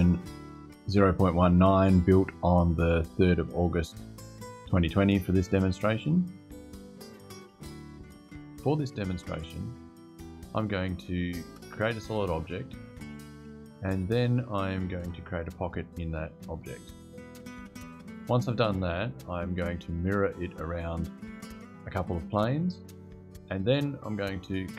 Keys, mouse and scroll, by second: 7.2 click.